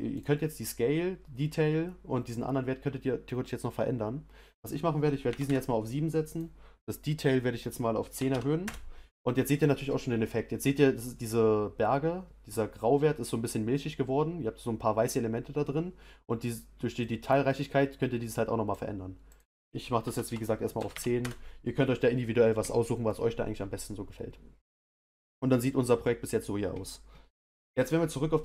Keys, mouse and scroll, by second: 21.0-28.4 drag.